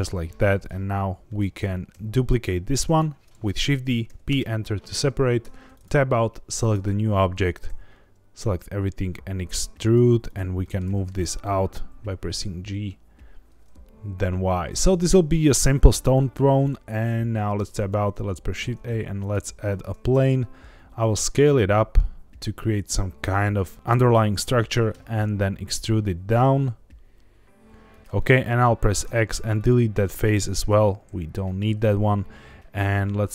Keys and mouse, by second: 0.3 3, 1.3 middle click, 1.9 shift+d, 2.8 right click, 4.0 p, 5.4 Tab, 5.7 click, 6.7 Tab, 7.3 a, 7.6 e, 9.8 click, 10.6 middle click, 10.8 g, 11.0 y, 14.6 click, 15.1 middle click, 17.4 Tab, 17.9 shift+a, 19.8 Tab, 20.1 s, 23.2 click, 24.9 e, 27.9 click, 29.0 x, 29.9 middle click, 30.8 middle click.